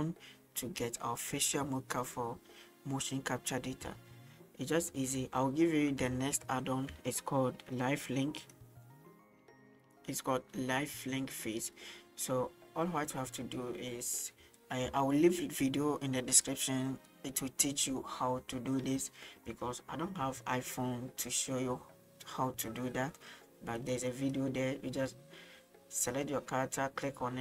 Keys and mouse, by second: 6.4 shift+middle drag, 8.4 click, 13.4-14.1 middle drag, 20.5-21.5 middle drag, 23.8 click, 24.2 click, 26.1 right click.